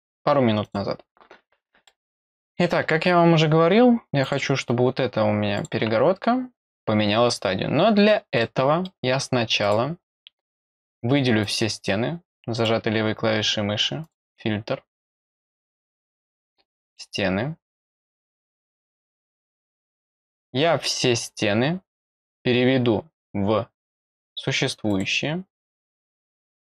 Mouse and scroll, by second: 0.6 click, 1.8 middle click, 4.2 click, 5.5 click, 7.5-8.1 scroll down 1, 8.4 middle click, 9.6 click, 11.4-12.6 drag, 14.0 click, 15.7 click, 17.6 click, 18.2 click, 22.2 click, 24.8 click, 26.2 click.